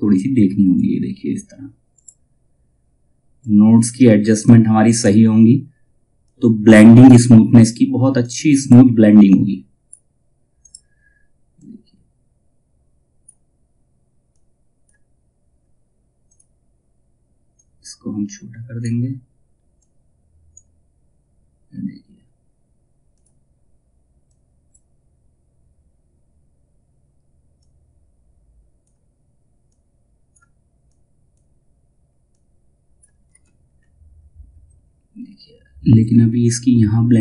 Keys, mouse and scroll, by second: 0.0-27.1 drag, 3.2 typing, 9.1 typing, 27.1-32.8 drag, 32.8 space, 33.2-34.8 scroll down 1, 35.5 space.